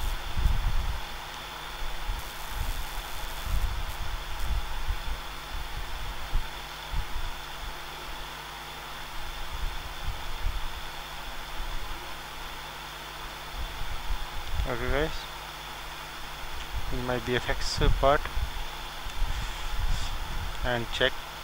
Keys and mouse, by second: 0.1-5.4 middle drag, 5.5-9.6 drag, 14.0-15.9 drag, 15.0-16.0 middle drag, 16.6 middle click, 16.9 middle click.